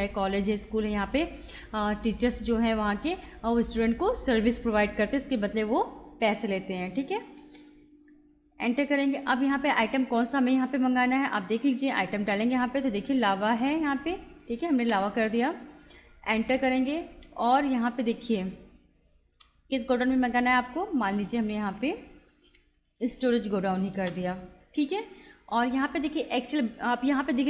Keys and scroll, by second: 7.4 Return, 12.2 l, 14.9 Return, 17.3 Return, 19.4 BackSpace, 21.6 Down, 24.0 Return.